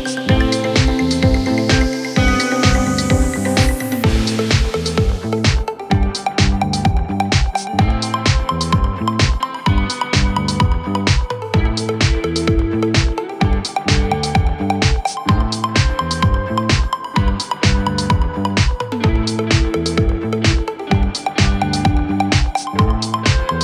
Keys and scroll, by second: 8.0 shift+Page_Up.